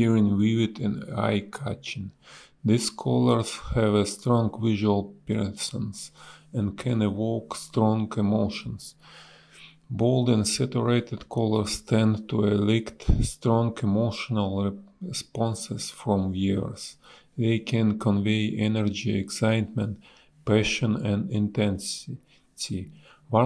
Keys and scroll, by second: 2.1 b, 3.4 ctrl+z, 4.8 a, 8.5 space, 8.8 b, 10.5 ctrl+z, 12.0 ctrl+z, 13.4 ctrl+z, 15.1 ctrl+z, 16.1 s, 16.6 a, 17.9 space, 19.6 space, 19.9 ctrl+z, 20.1 space, 20.5 space, 20.9 b, 22.3 ctrl+z.